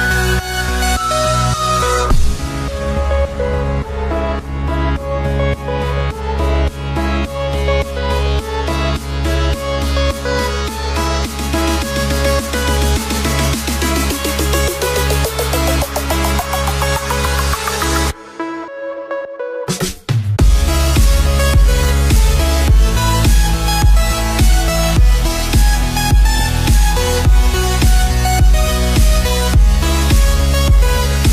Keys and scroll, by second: 3.4 space, 7.6 space, 10.7 ctrl+-, 10.9 space, 11.7 ctrl+-, 12.6 space, 12.8 ctrl+=, 17.3 ctrl+-, 19.1 b, 19.5 ctrl+=, 23.1 space, 24.6 ctrl+-, 25.0 ctrl+=, 25.8 6, 29.6 space, 29.7 ctrl+=.